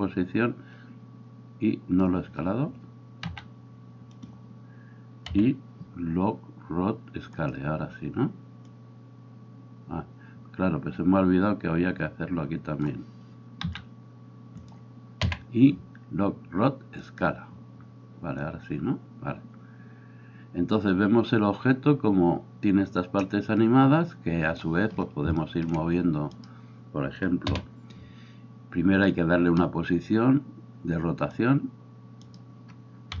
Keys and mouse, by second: 3.2 s, 4.3-8.8 middle drag, 5.4 i, 8.8-14.8 drag, 13.7 s, 14.8-18.5 middle drag, 15.3 i, 18.5-33.2 drag, 26.4-27.5 right drag.